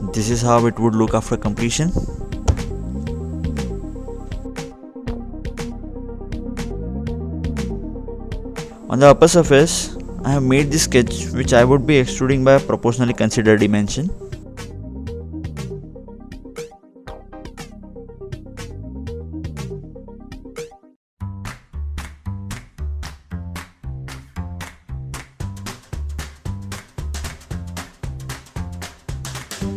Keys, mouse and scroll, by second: 0.2 click, 0.6 double click, 1.4 click, 1.8-2.4 scroll up 2, 2.4 middle click, 6.0 click, 6.4 ctrl+Tab, 7.9 ctrl+8, 8.3-9.5 scroll down 2, 9.6 scroll up 2, 9.9-11.1 scroll down 2, 11.1 scroll up 1, 11.2-12.8 scroll down 1, 12.8 scroll down 1, 13.4-14.4 scroll up 2, 14.4-14.9 scroll down 2, 14.9 scroll up 1, 15.0-16.3 scroll down 2, 16.6 click, 20.1 scroll up 1, 20.3-20.8 scroll down 1, 20.8 middle click, 21.9 click, 24.7 middle click, 25.6-26.8 scroll down 2, 28.4 middle click.